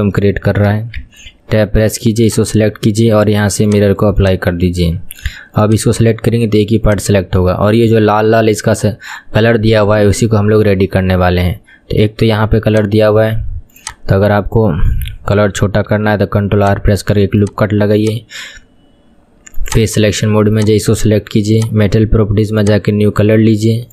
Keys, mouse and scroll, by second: 0.3-1.1 shift+middle drag, 1.1 Tab, 2.4 click, 4.3 click, 4.8 Tab, 5.7 click, 7.0 click, 13.9 click, 16.1 ctrl+r, 17.5 click, 18.1 click, 19.8 click, 22.7-23.9 drag.